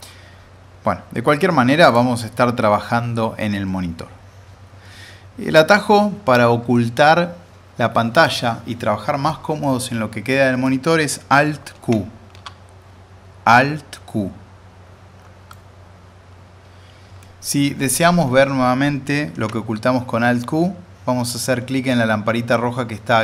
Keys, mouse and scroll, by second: 4.1 click, 6.3-6.9 middle drag, 10.3-10.9 middle drag, 11.7 alt+q, 15.5 alt+q, 15.6-17.4 alt+middle drag, 18.1 alt+q.